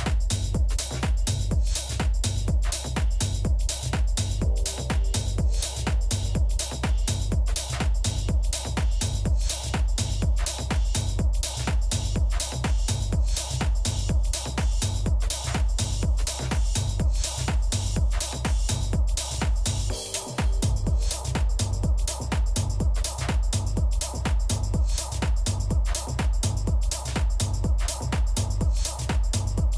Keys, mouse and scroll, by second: 4.5-6.4 drag, 6.9-9.3 middle drag, 10.5 Tab, 11.1-12.8 right drag, 11.8-12.8 middle drag, 14.7 s, 20.0-22.5 middle drag, 23.4 a, 24.0-26.0 right drag, 25.5 middle click, 26.3 Tab, 27.9-29.7 drag.